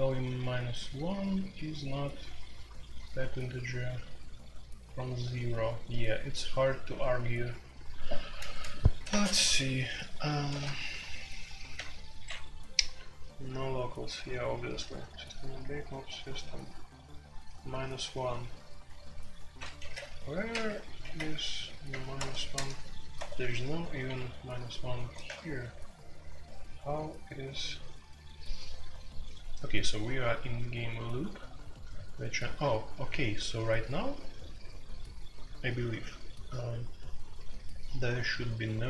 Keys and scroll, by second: 0.0-26.7 typing, 19.8 alt+1, 21.9 Return, 23.1 Escape.